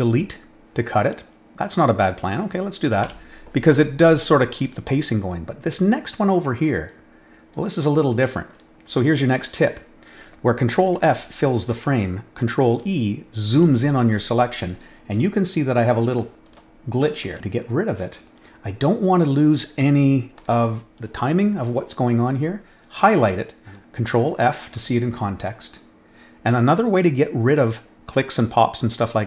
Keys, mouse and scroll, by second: 6.8-7.5 drag, 8.5 click, 9.4-10.0 drag, 10.9 ctrl+f, 16.4 click, 17.6-18.3 drag, 20.3 click, 22.8 click, 22.9 click, 24.2 ctrl+f.